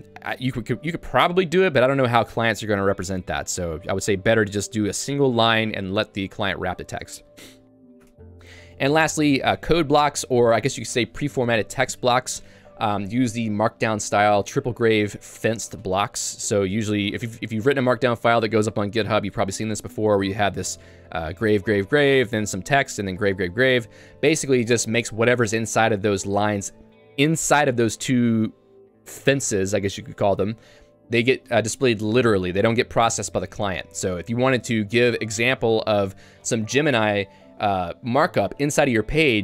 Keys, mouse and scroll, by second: 2.6 k, 3.0 j, 3.7 k, 6.9 j, 8.0 Tab, 8.7 j, 20.6-25.2 typing.